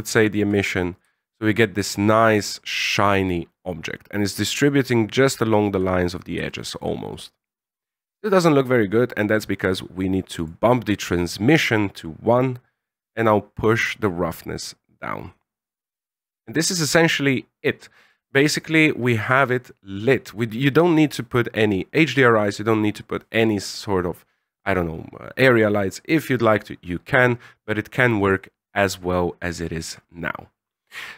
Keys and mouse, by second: 0.1 ctrl+click, 1.0 shift+click, 1.8-5.6 shift+drag, 6.4 shift+middle click, 9.6 click, 12.4-16.3 drag, 16.9 a, 30.7 middle click.